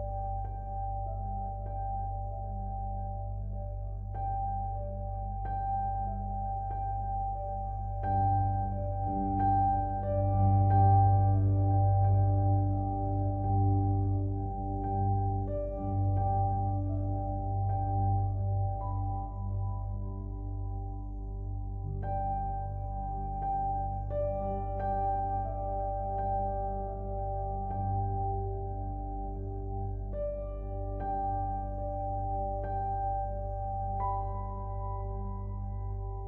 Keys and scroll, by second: 19.7 ctrl+t, 34.3 ctrl+t.